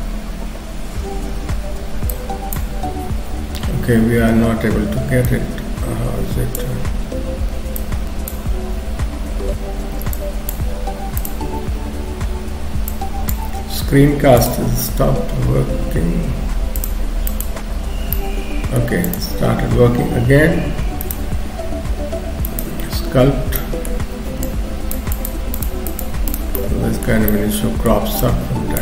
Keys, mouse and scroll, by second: 18.1 middle click, 19.1 click, 21.0 click, 23.6 middle click, 24.5 shift+click, 25.1 shift+click, 26.6 shift+middle click, 27.3 middle click, 28.2 shift+click.